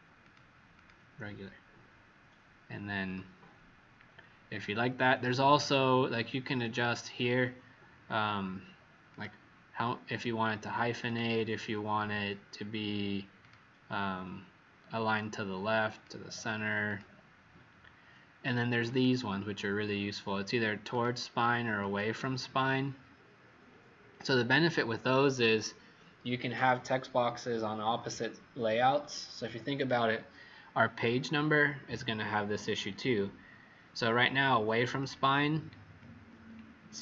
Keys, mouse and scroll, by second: 0.7 click, 5.5 click, 35.9-36.3 alt+scroll down 2.